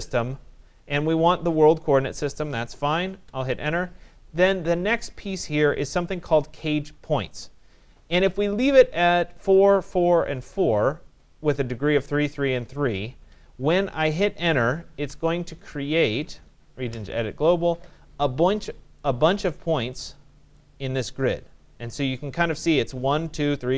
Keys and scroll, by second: 2.8 Return, 14.6 Return.